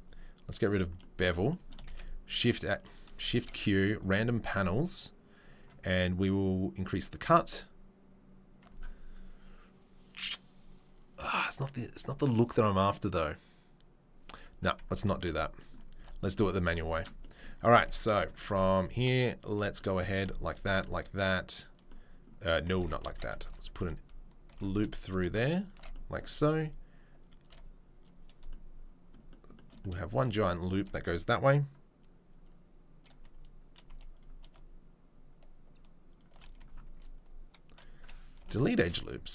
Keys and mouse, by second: 0.7-1.7 drag, 1.8 shift+a, 3.3 shift+q, 16.0 Tab, 16.2 click, 17.7 ctrl+click, 17.8 ctrl+r, 17.9 right click, 18.8 alt+click, 19.4 middle click, 20.7-22.6 middle drag, 22.8 ctrl+z, 26.6 click, 26.6 middle click, 27.2 click, 27.2 middle click, 34.1 alt+click, 34.1 alt+middle click.